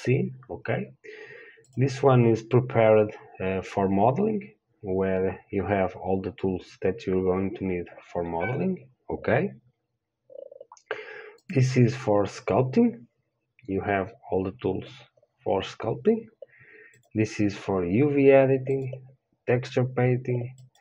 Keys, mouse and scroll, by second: 1.9-20.8 drag.